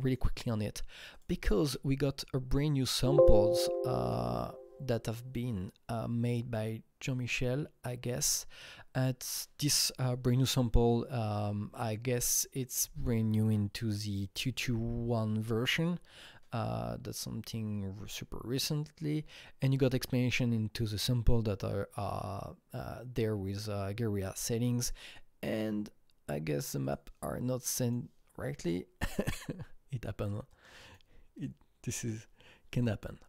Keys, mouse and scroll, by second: 0.2 click, 2.9 click, 4.0 click, 6.2 click, 19.3 click, 19.3-20.4 scroll down 4, 20.4-21.1 scroll up 2, 21.3-21.6 scroll up 1, 22.5-24.3 scroll down 1, 26.8 click, 26.8 scroll down 1, 27.8 click, 29.1-30.4 drag, 32.8-33.2 drag.